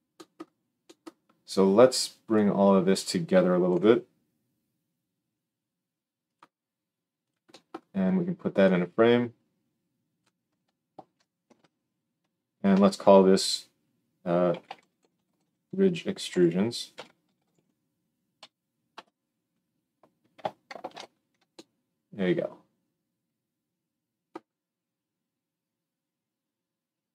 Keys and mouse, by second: 3.6 g, 6.3-7.1 middle drag, 7.1 click, 7.2-8.5 middle drag, 8.5-27.1 drag, 11.1 ctrl+KP_Enter, 11.3 ctrl+j, 12.6 F2, 20.7 ctrl+alt+space.